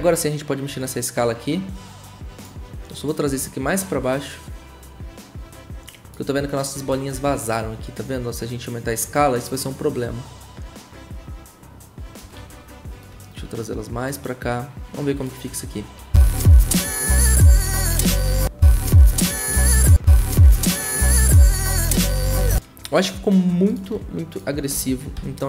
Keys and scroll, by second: 7.1 ctrl+z, 12.3 `, 15.9 0, 18.4 0, 19.9 0, 24.9-25.4 typing.